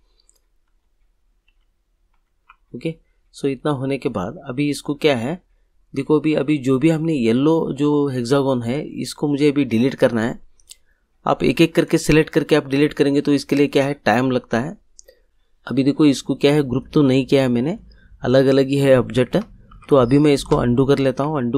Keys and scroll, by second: 0.6 ctrl+r, 19.7 ctrl+z.